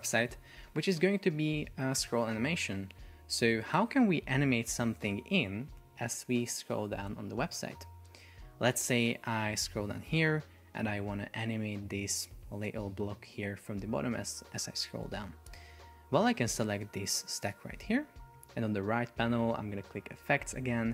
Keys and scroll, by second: 8.4 super+p, 10.9 shift+super+4, 13.0 space, 15.5 Escape.